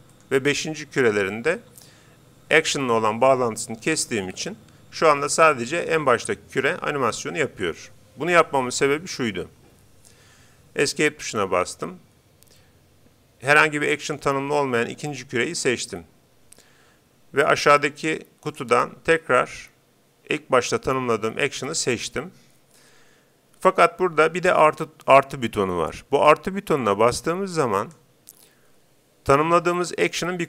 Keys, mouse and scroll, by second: 0.2-1.8 right drag, 1.1-2.8 drag, 4.4 alt+a, 10.2 Escape, 14.0-15.6 right drag, 18.5-20.1 drag, 27.8-29.4 drag.